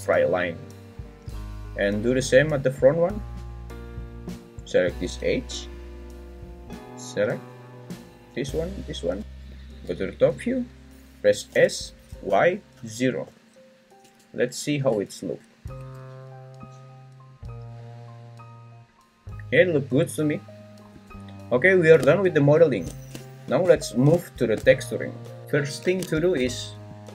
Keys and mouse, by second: 8.8 ctrl+click, 9.5 `, 11.5 s, 12.3 y, 12.7 0, 13.3 Return, 14.0 Tab, 14.9 Tab, 15.7 `, 20.9 `.